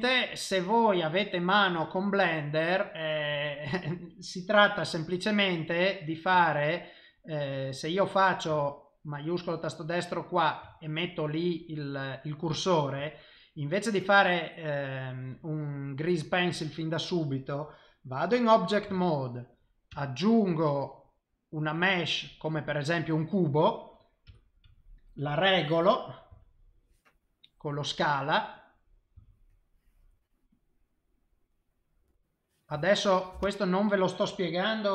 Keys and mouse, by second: 0.3 middle click, 4.8 KP_7, 8.9 shift+right click, 9.5 middle click, 10.7 shift+middle click, 17.5 click, 19.9 shift+a, 23.1 middle click, 24.3 KP_7, 26.4 s, 29.1 s, 30.8 middle click, 32.7 s.